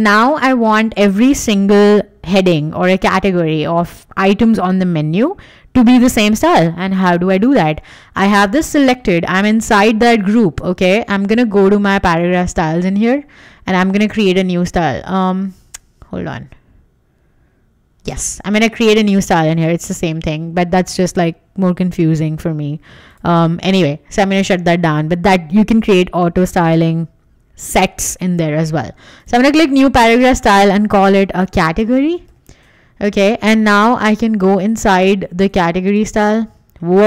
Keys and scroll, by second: 31.1-32.8 typing.